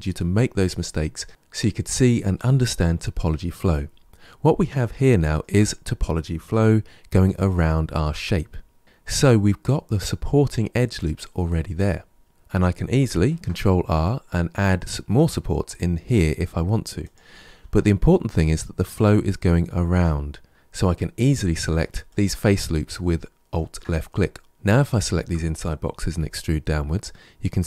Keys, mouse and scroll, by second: 3.7-4.9 scroll up 2, 4.9-7.3 shift+middle drag, 7.3 alt+click, 8.8 alt+click, 13.1 ctrl+r, 17.3 ctrl+z, 21.9 alt+click, 23.4 alt+click, 24.8 shift+click, 25.9 e.